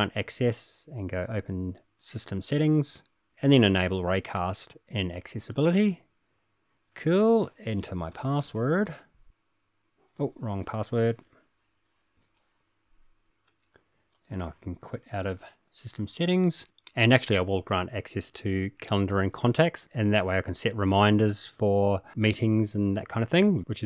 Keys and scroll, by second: 3.6 typing, 6.6 typing, 9.6 typing, 15.5 super+q.